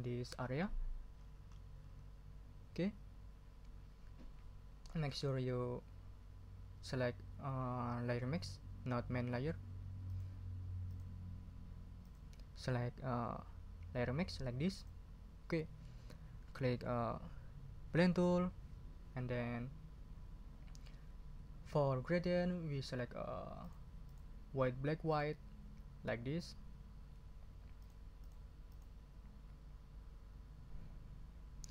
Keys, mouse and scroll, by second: 1.1 scroll up 2, 10.1 click, 10.9 click, 12.0 click, 14.7 click, 18.2 click, 22.4-22.8 scroll up 2, 23.6 click, 24.0 click, 25.1 click, 27.8 click, 28.2 click.